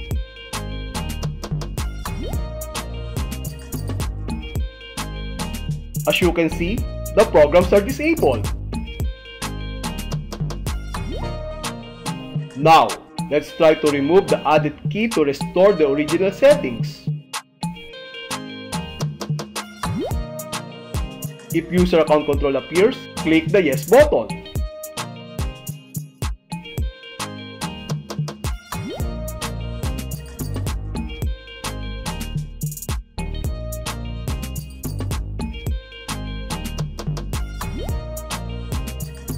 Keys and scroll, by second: 1.0 Return, 5.0 space, 17.2 super+r, 20.5 Return, 23.6 Left, 24.8 space, 26.8 h, 28.1 h, 29.1 Right, 31.1 s, 32.4 Right, 34.2 p, 35.2 Right, 36.9 m, 37.9 Right, 39.2 w.